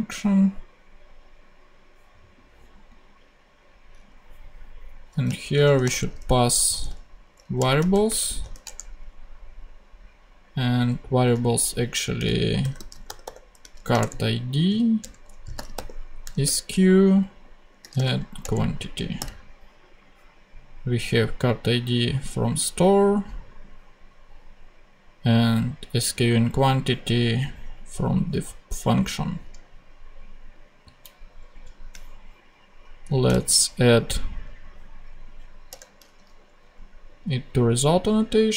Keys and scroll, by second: 5.6 shift+[, 5.8 shift+Return, 6.7 v, 7.5 Return, 7.9 shift+;, 8.0 shift+space, 8.4 shift+[, 8.6 shift+Return, 12.1 s, 12.5 BackSpace, 12.7 c, 13.5 shift+t, 13.9 shift+Return, 14.6 ,, 14.9 Return, 15.4 s, 16.4 Return, 17.7 q, 18.3 Return, 19.1 ,, 31.5 Left, 33.3 shift+super+c, 34.3 super+c, 35.6 Return.